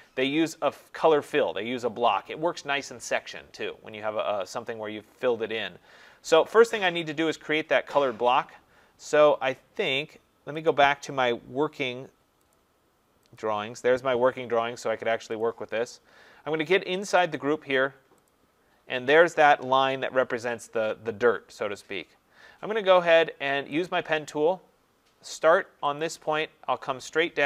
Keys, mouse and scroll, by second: 10.7 click, 12.6 click, 13.4 click, 15.4 click, 17.1 click, 17.4 click, 18.3 click, 23.9 click, 26.0 click.